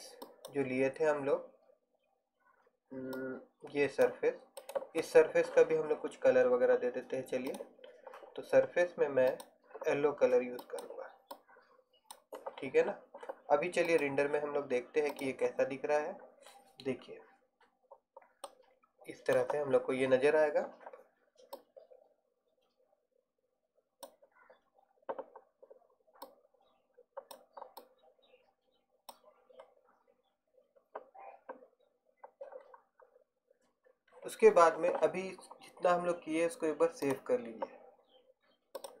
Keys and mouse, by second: 0.4-2.3 drag, 3.3 click, 4.0 right click, 5.6-7.6 right drag, 7.6 click, 18.6-20.9 middle drag, 22.8-24.8 middle drag, 34.2-37.2 middle drag, 37.2-39.0 drag.